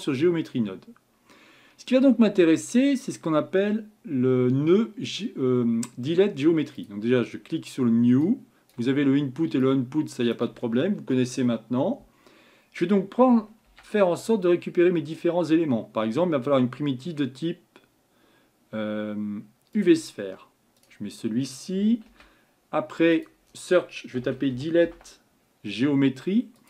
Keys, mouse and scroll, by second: 0.0 click, 1.3-2.4 middle drag, 2.4-3.5 scroll up 3, 3.5-4.9 scroll up 2, 6.8-19.8 drag.